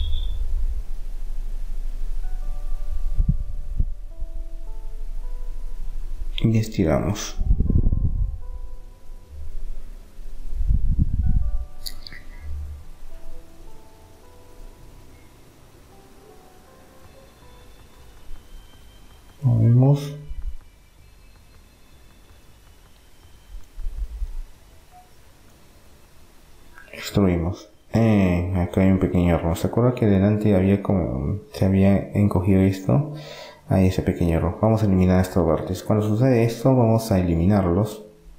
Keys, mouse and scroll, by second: 0.8 middle click, 1.6 a, 1.8 a, 3.1-5.1 drag, 12.8-14.1 middle drag, 14.1 click, 15.1-17.5 right drag, 16.4 click, 17.5 click, 18.1 middle click, 19.8-21.6 drag, 21.6-23.4 middle drag, 23.8 e, 25.1-26.4 drag, 28.8 middle click, 30.1-32.3 middle drag, 32.3 ctrl+z, 33.3 ctrl+z, 34.1 ctrl+z, 35.8 ctrl+z, 36.3 ctrl+z, 37.3-38.3 middle drag.